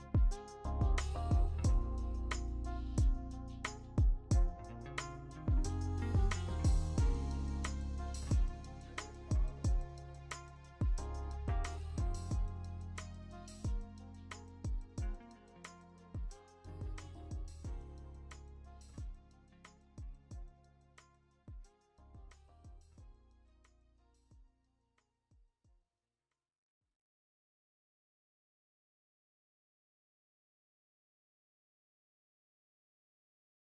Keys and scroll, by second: 7.2 x.